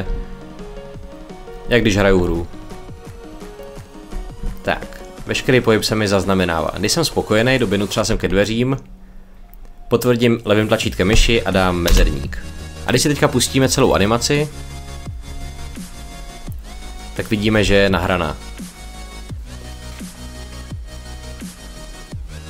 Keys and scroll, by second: 2.1 w, 4.0 w, 7.3 shift+a, 8.1 w, 11.7 space.